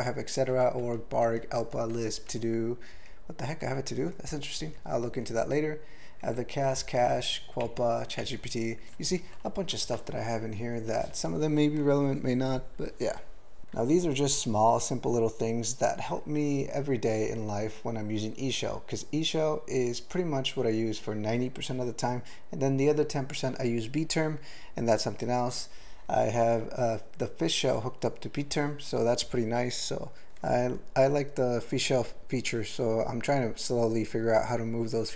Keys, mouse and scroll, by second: 0.5 Down, 0.8 Down, 1.2 Down, 1.6 Down, 1.9 Down, 2.3 Down, 2.9 Up, 4.6 Down, 5.1 Down, 6.3 Up, 6.7 Down, 7.0 Down, 7.6 Down, 8.2 Down, 9.7 ctrl+g.